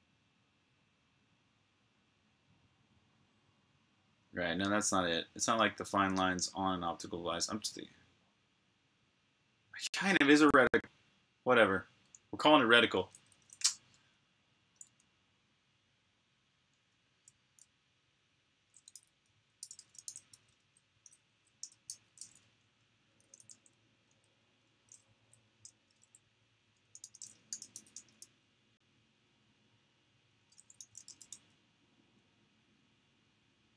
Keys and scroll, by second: 12.9 super+Tab, 19.3-22.5 typing, 23.8 typing, 25.6-26.0 BackSpace, 30.3-31.7 typing, 33.4 typing.